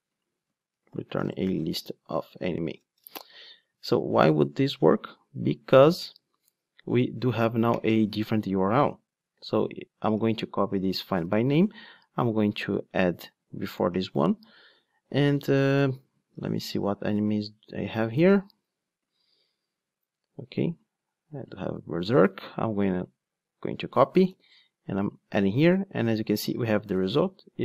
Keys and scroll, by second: 6.3 ctrl+r, 10.1 ctrl+r, 11.1 super+c.